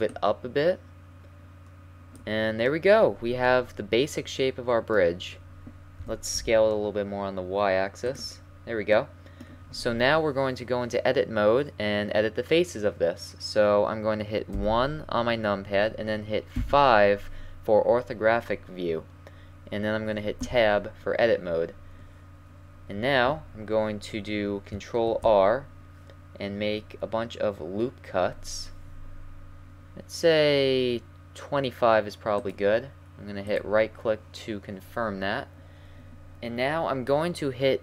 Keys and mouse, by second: 0.1-1.9 drag, 6.0 s, 14.5 KP_1, 16.6 KP_5, 20.6 Tab, 25.2 ctrl+r.